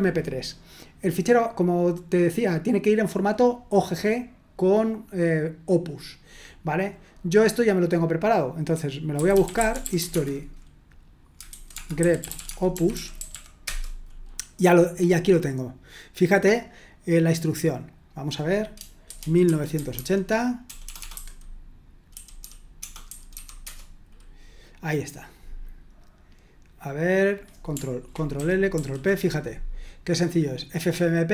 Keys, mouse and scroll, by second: 8.9-13.8 typing, 16.5-18.6 drag, 18.8-23.3 typing, 23.6 Return, 26.0-26.5 scroll up 1, 26.5-27.2 scroll down 1, 27.2-27.7 scroll down 1, 28.3 ctrl+l, 28.7 ctrl+p.